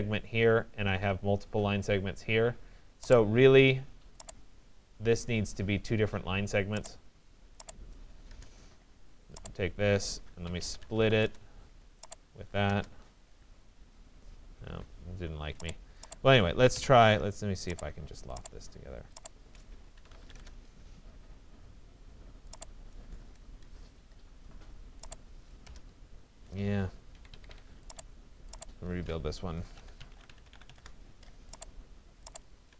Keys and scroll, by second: 7.8 Return, 14.6 Escape, 16.7 Delete, 20.4 Return, 25.3 Return, 27.1 Escape, 30.8 Return.